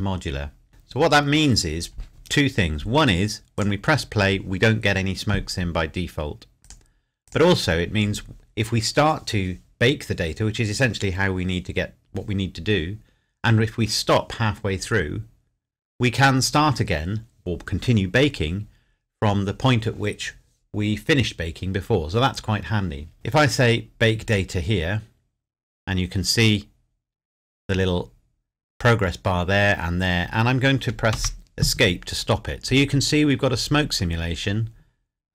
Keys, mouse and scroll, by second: 3.6 click, 6.6 click, 24.3 click, 31.1 Escape.